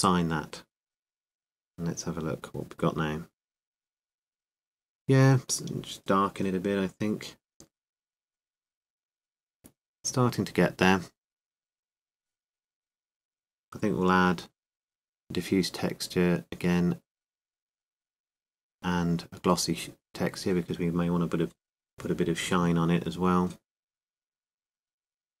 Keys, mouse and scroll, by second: 0.8-9.1 drag, 1.9 Tab, 13.8-16.4 drag, 21.0-25.4 drag.